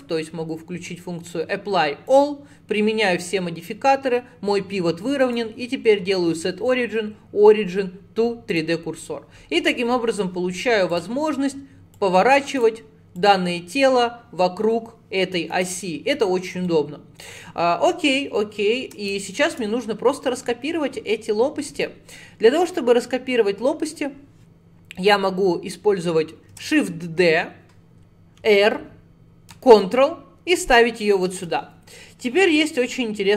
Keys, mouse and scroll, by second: 2.1-5.2 drag, 5.3-9.4 right drag, 9.5 scroll down 2, 9.7-10.9 middle drag, 10.9-12.0 drag, 13.2 click, 16.7 alt+middle click, 17.5-20.5 middle drag, 26.6 shift+d.